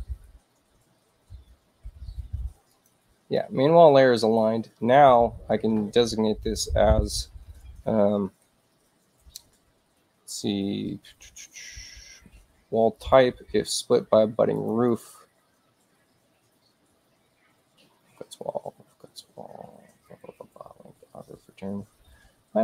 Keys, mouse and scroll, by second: 2.6 click, 12.9 click, 14.5 click, 14.8 click.